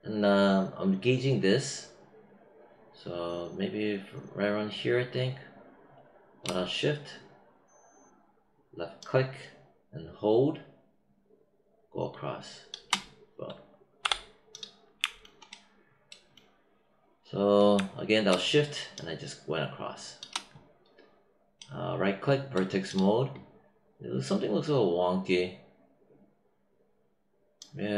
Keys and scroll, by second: 14.0 w.